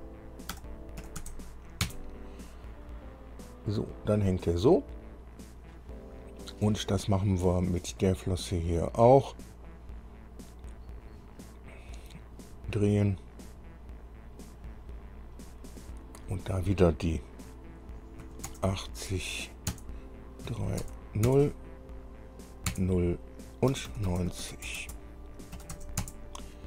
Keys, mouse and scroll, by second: 0.0-1.5 typing, 2.1 KP_Enter, 8.3 click, 13.7 click, 18.5 KP_8, 18.7 KP_0, 19.9 KP_Enter, 20.7 KP_3, 21.1 KP_Enter, 21.5 KP_Enter, 22.9 KP_Enter, 23.9-26.0 typing, 26.3 KP_Enter.